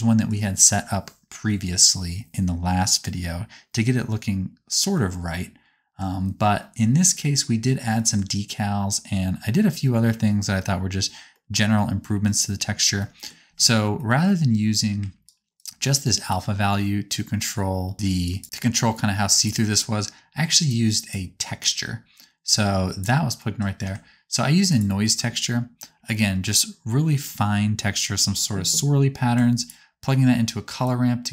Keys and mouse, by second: 15.2 ctrl+click, 15.6-17.9 right drag, 16.3-17.9 drag, 16.3-17.9 middle drag, 18.3-19.5 drag, 20.6-24.8 drag, 26.4-29.5 right drag, 29.5 ctrl+shift+click, 30.8-31.3 drag.